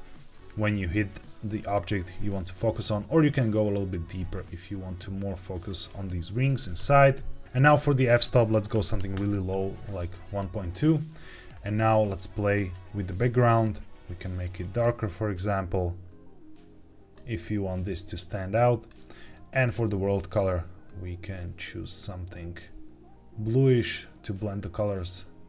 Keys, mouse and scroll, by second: 2.5-5.6 drag, 6.7 KP_0, 7.4 ctrl+z, 7.9-9.1 drag, 10.5 scroll down 1, 11.1 click, 12.6 click, 14.7 click, 19.5 click, 20.2 click.